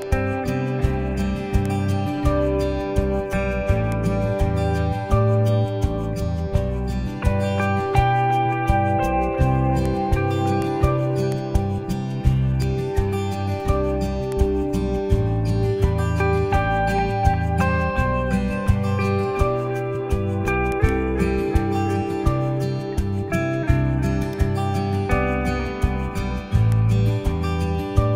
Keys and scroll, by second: 18.2 alt+shift+super+e.